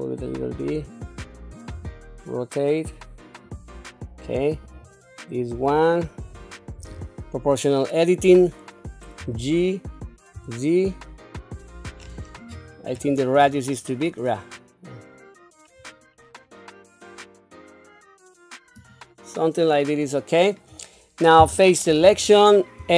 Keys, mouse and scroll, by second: 1.7 r, 4.6 click, 6.8 o, 9.2 g, 21.4 3, 22.8 a.